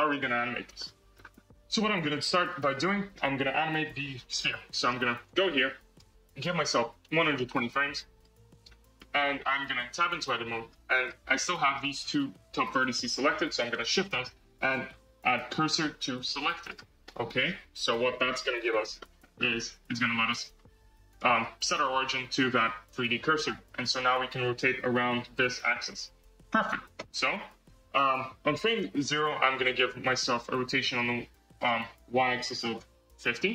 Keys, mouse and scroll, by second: 0.4-0.7 scroll up 1, 0.7-1.3 shift+middle drag, 1.3-2.6 scroll up 4, 2.6 click, 3.1-4.3 middle drag, 4.3 KP_3, 5.0 scroll down 3, 5.8 click, 6.6-8.2 drag, 8.6-8.9 scroll down 1, 8.9-9.9 middle drag, 9.9 Tab, 10.2-10.8 middle drag, 10.8-11.4 scroll up 1, 11.4-11.9 shift+middle drag, 11.9-12.9 scroll up 2, 12.9-13.8 scroll up 1, 13.8 shift+s, 17.0-17.7 middle drag, 17.7 KP_3, 18.3-18.9 scroll down 6, 18.9-19.3 shift+middle drag, 19.3 scroll up 4, 19.5 Tab, 19.9 scroll up 1, 20.1-20.6 scroll down 4, 21.0-23.1 right drag, 23.1 scroll, 24.2 r, 26.9 n, 30.8 click, 32.2-33.5 drag.